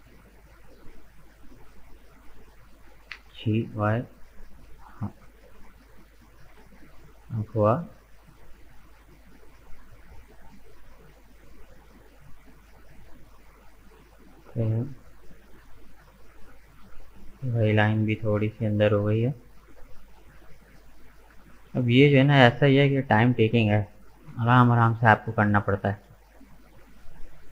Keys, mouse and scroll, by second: 0.9-3.1 middle drag, 3.1 g, 6.4 middle click, 7.2 scroll down 1, 7.2-8.8 middle drag, 8.8 scroll down 1, 9.1-12.2 middle drag, 12.2-12.5 scroll up 2, 12.5-16.0 middle drag, 16.0 right click, 16.5-17.6 shift+middle drag, 17.6 shift+right click, 18.1 shift+right click, 18.5-19.8 shift+middle drag, 19.8 shift+right click, 20.4 shift+right click, 21.0 shift+right click, 21.3-22.5 shift+middle drag, 22.5 shift+right click, 23.0-25.7 shift+middle drag, 25.7 g.